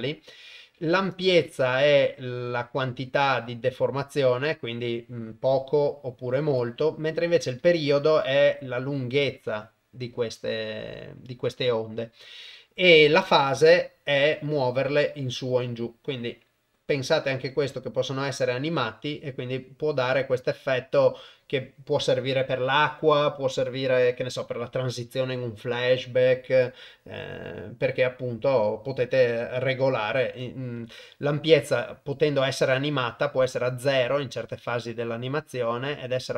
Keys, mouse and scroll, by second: 1.1-6.6 shift+drag, 7.8-12.2 shift+drag, 13.4-26.6 drag, 30.4-36.3 drag.